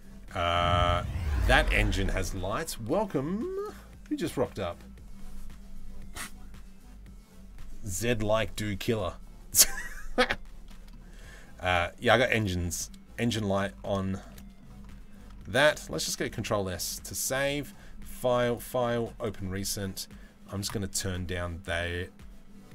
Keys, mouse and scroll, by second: 10.3 middle click, 11.3 click, 12.4-13.2 middle drag, 13.7 shift+middle drag, 14.0 middle drag, 16.0 ctrl+s, 17.2 click, 18.1-22.7 drag.